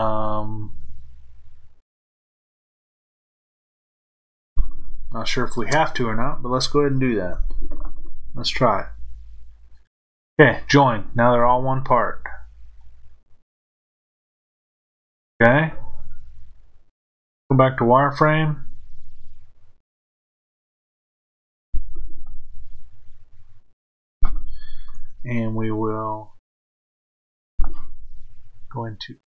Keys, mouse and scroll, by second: 11.9-15.0 scroll up 1, 15.0-15.5 scroll down 1, 17.5 click, 23.1-25.0 scroll up 1, 26.4-28.5 shift+middle drag, 28.5-29.2 drag.